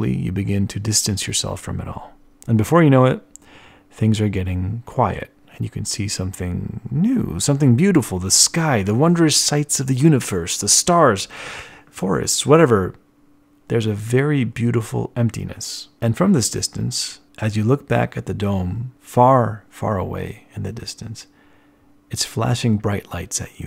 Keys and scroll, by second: 2.6 b.